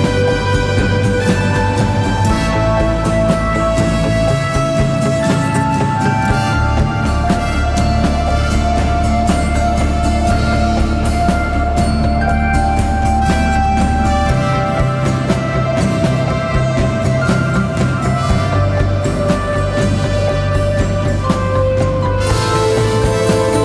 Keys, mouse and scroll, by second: 3.6 alt+click, 6.5 alt+click, 14.8-17.0 typing.